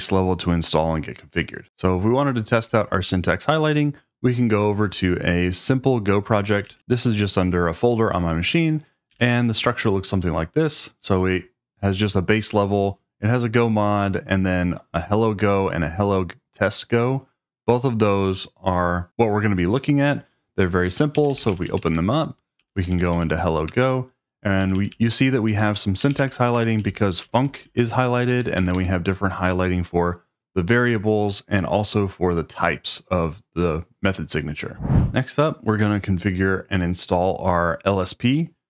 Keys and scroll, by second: 6.4-7.2 typing, 8.9-9.6 typing, 20.9-23.2 typing, 23.6 Return, 24.6-28.9 typing.